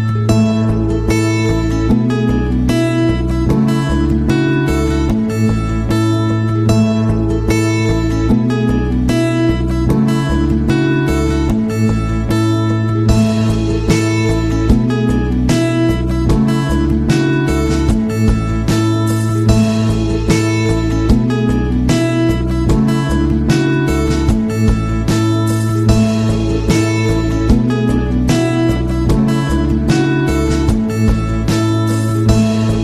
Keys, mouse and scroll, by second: 0.5 click, 1.4 click, 2.6 click, 4.2-5.8 scroll up 2, 5.8-6.8 scroll up 2, 7.2 scroll up 2, 7.8-8.1 scroll up 2, 12.6 click, 13.9 click, 15.3 click, 16.5-18.3 drag, 18.9 right click, 19.8 click, 20.9 click, 23.3 click, 24.6 click, 27.1-27.8 scroll down 2, 28.1-29.6 scroll down 6, 30.8 click.